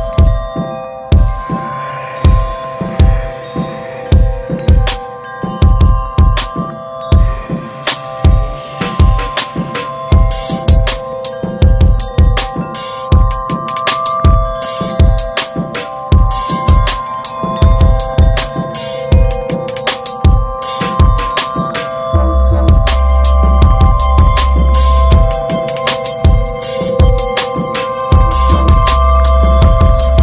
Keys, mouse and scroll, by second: 1.7 scroll down 1, 1.8-3.2 middle drag, 3.2-8.1 drag, 8.1 ctrl+s, 8.3-9.0 drag, 9.5 click, 10.0 ctrl+s, 10.4 shift+click, 12.3 /, 12.7 click, 13.1 ctrl+s, 13.3 scroll up 2, 13.6-14.9 shift+middle drag, 14.9-18.8 drag, 21.6-22.2 ctrl+scroll down 2, 24.7 click, 25.6 drag, 26.7 click, 27.4 ctrl+z, 27.6-28.8 middle drag, 28.8 drag.